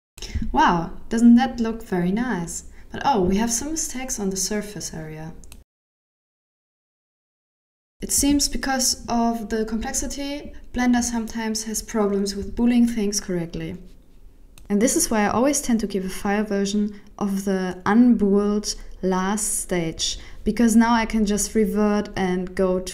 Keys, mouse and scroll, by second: 0.0 middle click, 0.6 scroll up 5, 0.9 middle click, 3.7 right click, 4.1 middle click, 10.3 scroll up 1, 10.6 scroll down 4, 10.9 middle click, 15.8 g, 17.2 ctrl+z, 17.5 ctrl+z, 18.1 middle click, 19.5 KP_1, 20.0 alt+z, 21.0 right click, 21.7-22.2 scroll up 5, 22.2 middle click.